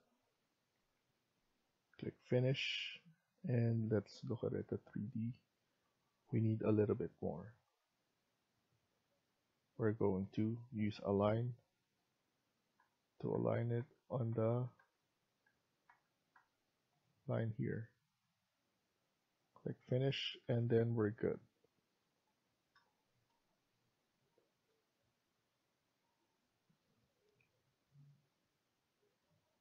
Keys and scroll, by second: 0.4 Escape, 0.7 Escape, 12.6-20.1 typing, 20.1 Escape, 20.4 Escape.